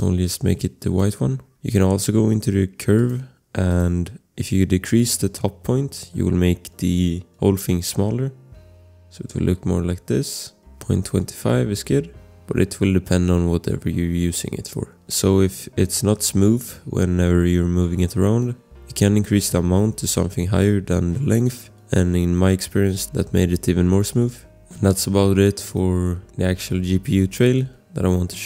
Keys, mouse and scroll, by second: 1.1 scroll, 3.0 click, 4.2 scroll, 6.0 click, 7.7 click, 10.5 click, 16.7 click, 18.8 click, 21.6 click, 24.6 scroll, 25.9 click, 26.3 scroll.